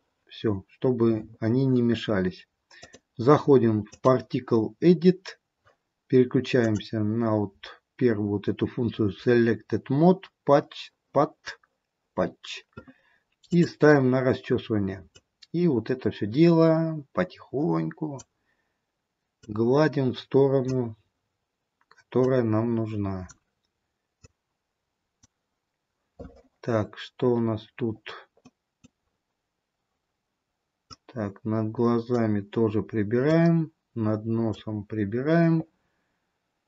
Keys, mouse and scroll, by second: 2.8 click, 5.5-6.1 scroll down 1, 6.9 click, 13.5 click, 15.4 click, 19.6 click, 22.4 click, 27.9-28.7 scroll up 5, 28.7 middle click, 29.1-30.9 scroll down 1, 30.9 scroll down 2, 31.1 click, 33.5 click, 35.9-36.5 scroll down 4.